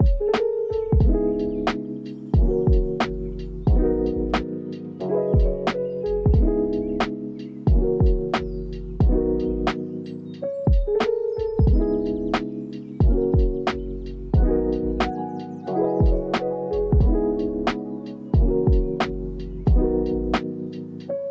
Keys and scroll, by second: 3.9 z, 7.9 z, 13.1 u, 14.8 x, 20.1 ctrl+s.